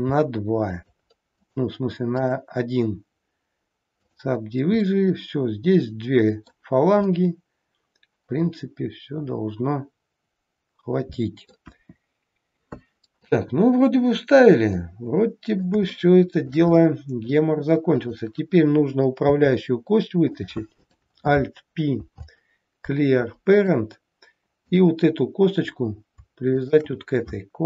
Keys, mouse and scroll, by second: 1.3 click, 2.2 right click, 4.9 middle click, 7.1 middle click, 11.7 KP_1, 12.3 scroll down 2, 13.2 middle click, 15.8 shift+middle click, 16.7 middle click, 17.8 click, 19.2 e, 20.8 click, 22.1 alt+p, 24.7 click, 26.6 shift+click.